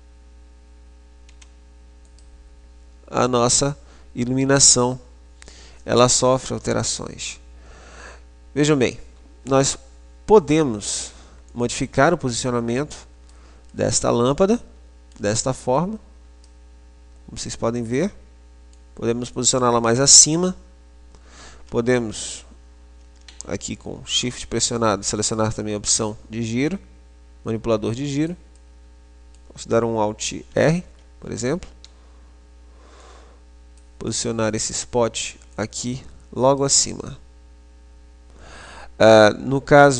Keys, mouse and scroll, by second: 1.4 s, 11.6 click, 13.6-15.8 middle drag, 15.8 click, 16.9 middle click, 17.6-21.3 middle drag, 19.4 click, 25.4-28.6 drag, 28.6-30.8 middle drag, 30.8 alt+r, 31.9 ', 33.3 click, 34.9 middle click, 35.8 click.